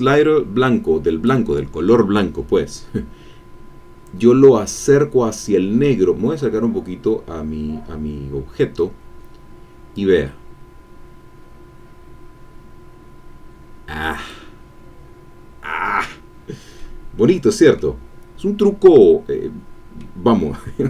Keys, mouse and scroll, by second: 5.8 scroll up 1, 6.6-7.1 scroll up 2, 9.9-14.6 drag, 15.0-15.6 scroll down 2, 16.7-18.0 middle drag, 18.6-20.2 middle drag.